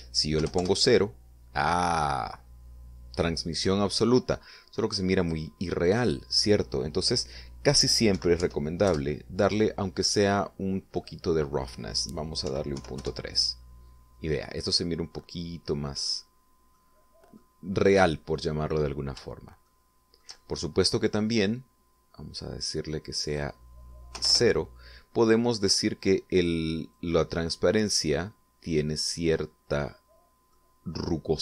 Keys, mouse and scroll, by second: 0.9 0, 1.1 Return, 5.7 click, 8.7 ., 8.9 1, 9.3 Return, 11.5 click, 13.0 ., 13.3 3, 13.5 Return, 15.3 scroll down 2, 15.7-16.8 middle drag, 17.3 middle click, 18.3 scroll up 1, 19.1 scroll down 1, 20.2 shift+middle click, 23.8 click, 24.7 0, 24.8 Return, 27.5-29.9 drag, 30.4 middle click.